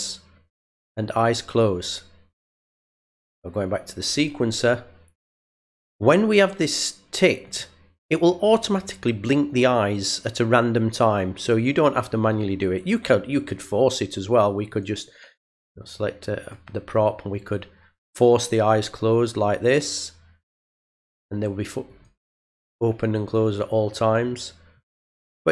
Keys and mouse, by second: 0.7 click, 2.7 click, 4.1 click, 7.4 click, 14.7 click, 16.4 click, 20.8 click, 21.8 click, 23.1 click, 24.0 click, 24.7 click.